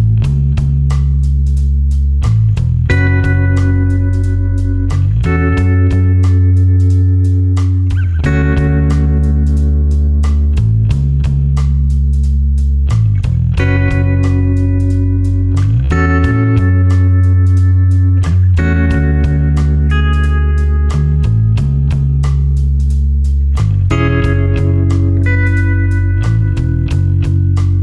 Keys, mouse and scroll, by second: 2.8 click, 5.4 ctrl+click, 5.8 ctrl+space, 6.4 click, 6.5 space, 7.2 click, 11.1 click, 11.5-11.9 scroll up 1, 14.8 click, 15.8 KP_8, 16.4 KP_Enter, 18.2 click, 20.3 space, 20.4 click, 24.2 right click.